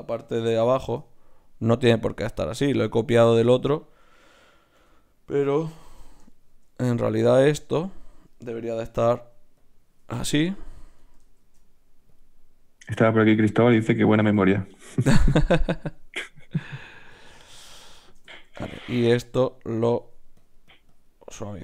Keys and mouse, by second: 0.3 ctrl+n, 4.7 KP_Divide, 6.5-8.8 drag, 8.9 right click, 9.3 d, 9.8-11.4 drag, 11.4 shift+q, 13.5-17.1 middle drag, 14.3 n, 17.1-19.0 drag, 17.6 n, 19.0 Tab, 19.8 click, 20.4 right click.